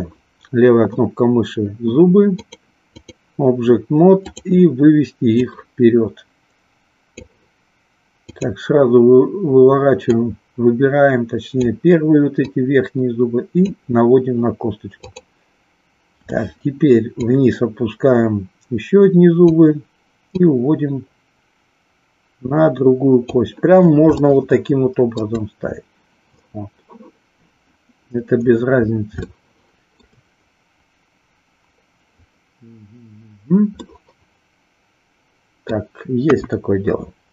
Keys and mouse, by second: 2.3 click, 4.3 click, 5.3-7.3 drag, 10.0-11.6 drag, 12.5-13.9 drag, 15.0 click, 17.1-19.5 drag, 20.4-23.3 drag, 24.2-25.2 shift+middle drag, 29.4-30.1 shift+middle drag, 33.9-35.8 middle drag, 36.3 KP_1.